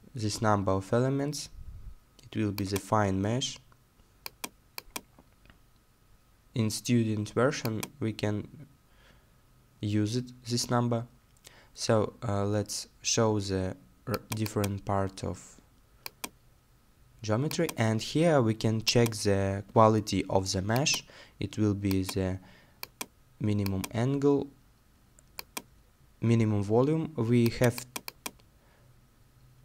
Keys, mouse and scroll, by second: 0.7 middle click, 3.0-5.1 scroll down 1, 5.7 middle click, 8.1 middle click, 13.5 scroll down 1.